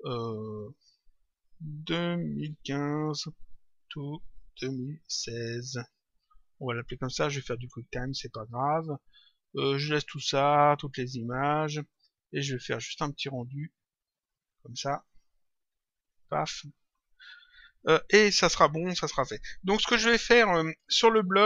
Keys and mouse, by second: 8.3 click, 11.8 click, 13.2 click, 16.0 click.